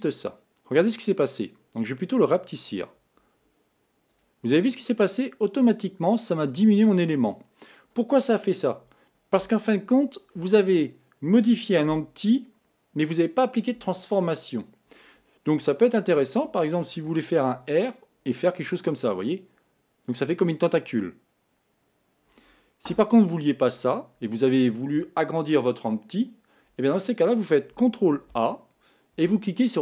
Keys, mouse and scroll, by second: 17.9 r, 28.5 ctrl+a.